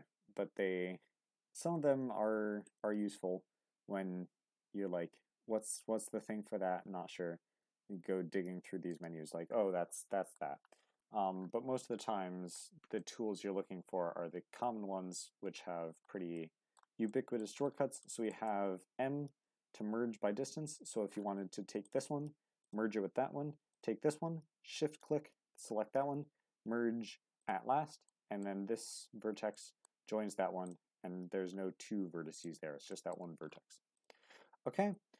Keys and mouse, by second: 10.0 middle click, 10.9 Tab, 12.0-13.0 middle drag, 16.3 middle click, 17.1-17.4 middle drag, 18.0 middle click, 18.3 Tab, 19.6 m, 23.7 click, 24.9 shift+click, 25.9 m, 28.1 middle click, 29.5 middle click, 32.9 middle click, 33.2 Tab, 33.8 x.